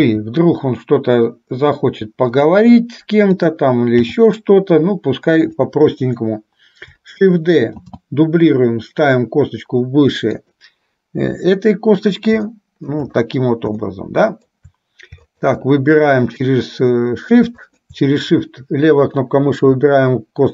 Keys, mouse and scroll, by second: 0.1 g, 3.5 click, 4.3 g, 6.2 click, 8.0 shift+d, 12.6 shift+middle click, 14.1 shift+middle click, 15.5 shift+click, 17.7 shift+click.